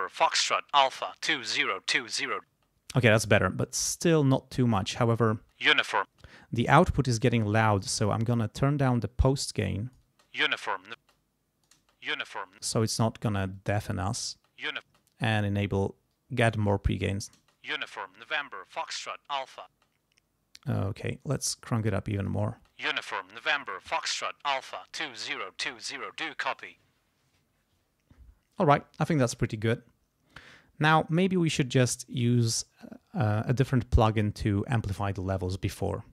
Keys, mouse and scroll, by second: 2.5 space, 5.3 space, 6.1 space, 8.8-10.1 drag, 10.1 space, 11.0 space, 11.1 click, 11.7 space, 12.6 space, 13.5 click, 14.3 space, 15.1 click, 17.4 space, 19.7 space, 21.2-22.5 drag, 22.5 space, 28.2 space, 35.8 click.